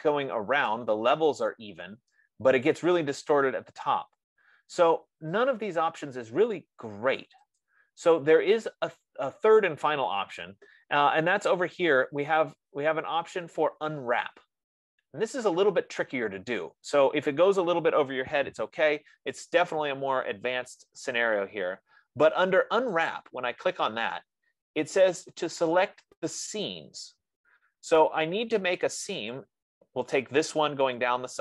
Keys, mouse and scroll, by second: 1.1 right click, 3.1 right click, 8.0 click, 9.3-10.0 scroll, 10.0 scroll, 23.6-28.5 drag, 29.7 click.